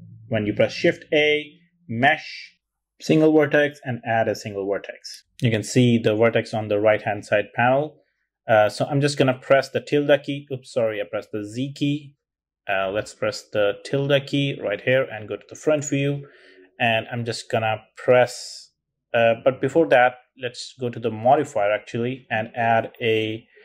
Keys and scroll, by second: 0.6 shift+a, 9.8 z, 12.7 z, 13.8 `.